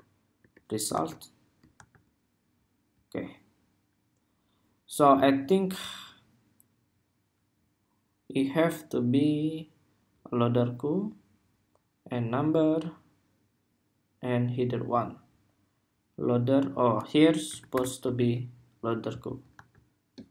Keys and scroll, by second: 0.1 super+Tab, 0.7 super+r, 1.6 super+r, 17.9 super+s, 19.4 super+r.